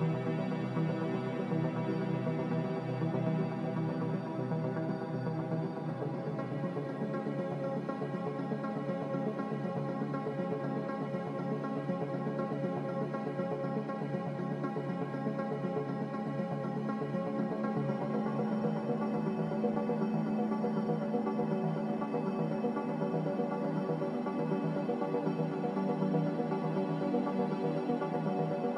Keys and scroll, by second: 1.2 Delete, 3.5 Delete, 5.1 Delete, 9.5 Delete, 11.8 Delete, 13.7 Delete, 15.7 Delete, 17.6 Delete, 19.6 Delete, 21.1 Delete, 24.9 Delete.